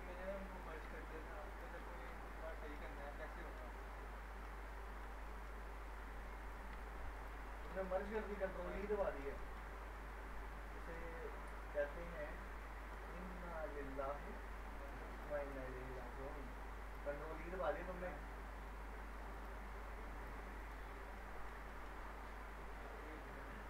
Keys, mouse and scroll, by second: 0.5 click, 1.5 ctrl+click, 1.8 ctrl+shift+e, 2.1 scroll down 1, 2.5-3.6 alt+middle drag, 5.6-6.1 scroll up 1, 6.4 click, 7.2 ctrl+click, 7.4 ctrl+shift+e, 7.8-8.9 middle click, 9.9-11.2 alt+middle drag, 14.8 click, 15.4 right click, 16.9 click, 17.8 s, 19.3 click, 20.6 right click, 20.9 scroll down 1, 21.2 alt+middle click, 22.0 scroll up 1.